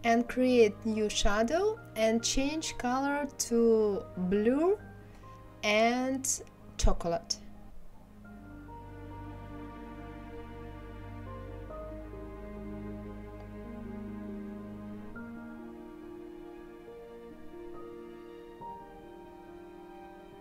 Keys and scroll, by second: 1.0 Delete, 1.4 Delete, 1.5-2.3 typing, 2.8 ctrl+c, 3.3 Left, 5.2 ctrl+c, 5.2 ctrl+f, 8.4 Delete, 9.3 Delete.